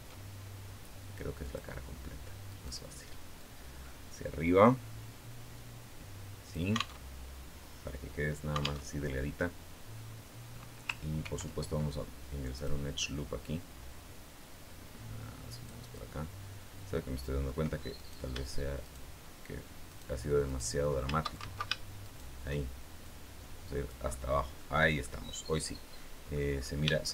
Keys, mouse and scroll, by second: 1.2 click, 2.2 right click, 3.2-6.5 drag, 6.8 alt+Tab, 8.6 alt+Tab, 11.0 ctrl+r, 12.4 click, 15.3 click, 16.7 middle click, 17.8 right click, 18.6 shift+right click, 19.7 shift+right click, 20.2 shift+right click, 21.2 ctrl+shift+z, 21.8 ctrl+shift+right click, 22.8 click, 23.9 middle click, 24.4 scroll up 2, 24.6 scroll down 2, 24.8-26.3 middle drag, 26.8 shift+middle click.